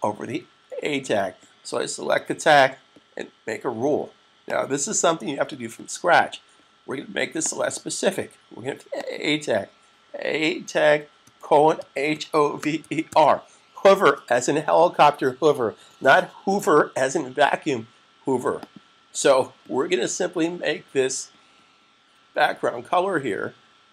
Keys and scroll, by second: 11.1-13.6 typing.